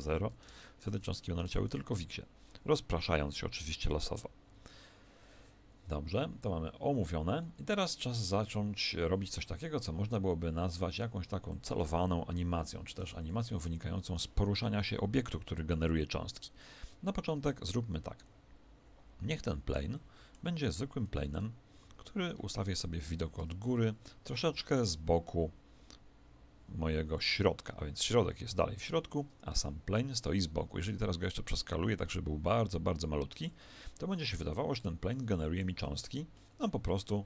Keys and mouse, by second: 1.4 alt+a, 4.5 Escape, 7.3 click, 17.0-22.7 middle drag, 21.1 KP_1, 21.7 KP_7, 23.3 Tab, 24.3 click, 30.8 s, 33.6 Tab, 34.3-37.2 middle drag, 35.8 alt+a.